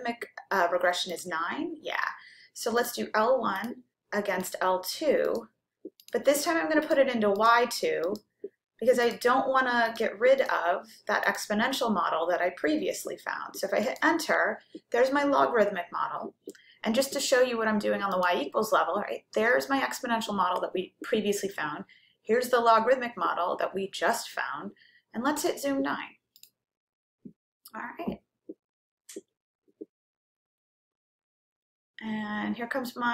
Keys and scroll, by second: 1.2 9, 3.8 1, 4.7 ,, 6.3 2, 7.1 ,, 8.1 Right, 9.1 Return, 10.7 Down, 11.3 Return, 13.9 Return, 26.4 9.